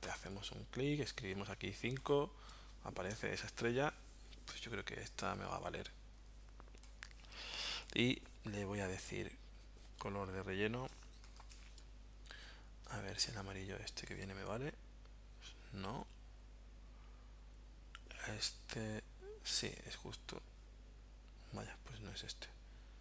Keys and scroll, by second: 1.3 5, 6.3 v.